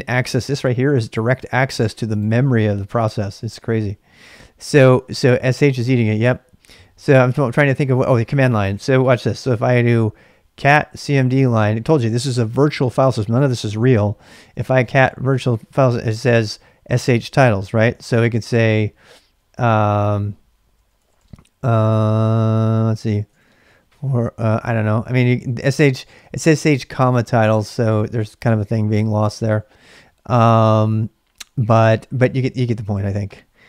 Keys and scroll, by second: 9.1-12.1 typing, 14.7 Return, 18.7-25.7 typing.